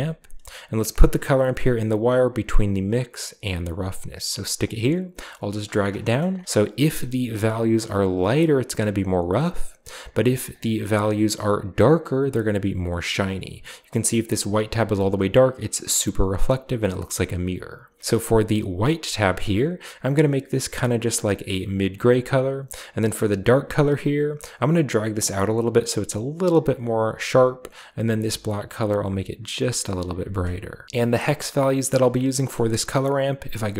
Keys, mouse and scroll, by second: 0.6 click, 3.7 click, 4.5-5.9 drag, 6.0 scroll up 2, 7.3-9.5 drag, 10.4 click, 10.8 click, 11.4-16.9 drag, 16.8 right click, 18.7-19.0 drag, 19.2 click, 20.7-21.8 drag, 23.3 click, 25.3-27.0 drag, 27.9 click, 28.9-30.2 drag, 31.0 ctrl+v, 31.0 c, 31.7 drag, 32.1-32.8 scroll down 1.